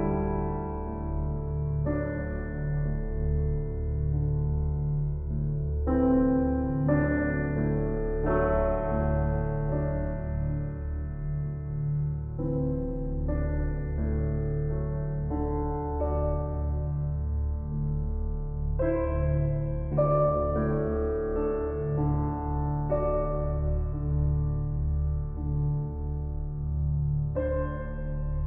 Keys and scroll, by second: 0.7 ctrl+t.